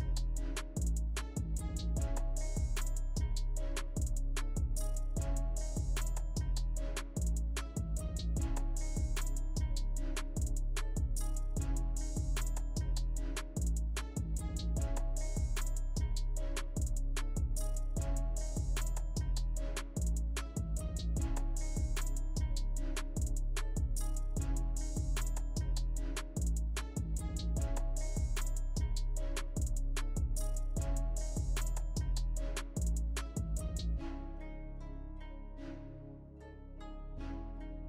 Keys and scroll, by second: 9.6 ctrl+shift+g, 10.3 ctrl+z, 11.6 ctrl+z, 13.6 ctrl+z, 17.5 ctrl+g, 20.2 ctrl+z, 23.8 ctrl+shift+g, 27.3 ctrl+shift+g, 30.2 ctrl+shift+g, 32.4 ctrl+shift+g, 33.1 ctrl+alt+shift+space, 36.0 ctrl+shift+g, 36.7 ctrl+alt+shift+space.